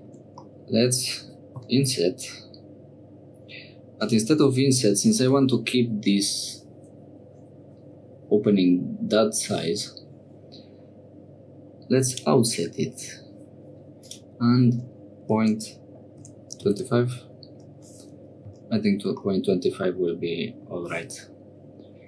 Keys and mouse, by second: 0.4 click, 1.8 i, 14.0-17.8 drag, 18.5 Tab, 19.2-20.7 middle drag.